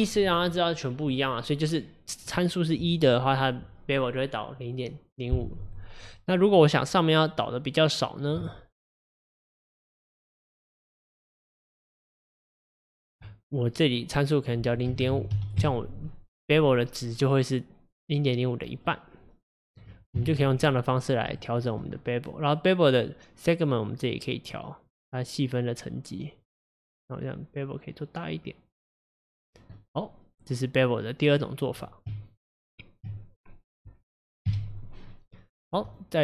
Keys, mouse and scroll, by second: 6.6 click, 8.8 shift+click, 9.1 shift+click, 9.6 shift+click, 10.1 shift+click, 10.5 shift+click, 10.8 shift+click, 11.3 shift+click, 11.7 shift+click, 12.8 shift+click, 14.5-17.5 drag, 19.0-20.2 middle drag, 20.2 KP_1, 21.4-23.9 shift+middle drag, 23.9-29.5 drag, 29.8-32.1 middle drag, 32.1 Tab, 33.7 scroll down 2, 34.5 KP_Divide, 35.1 scroll down 4, 35.4-35.9 middle drag, 35.9 click.